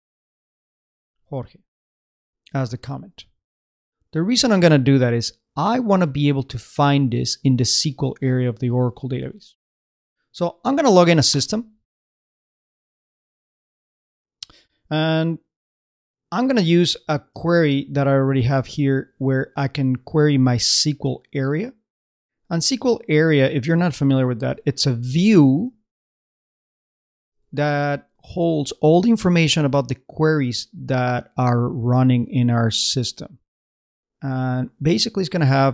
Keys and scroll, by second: 0.4 shift+space, 1.9-3.0 typing, 9.4 super+Tab, 16.8 super+Tab, 24.6 super+c, 24.9 super+Tab, 26.7 super+i, 27.3 super+space, 27.6 super+Return.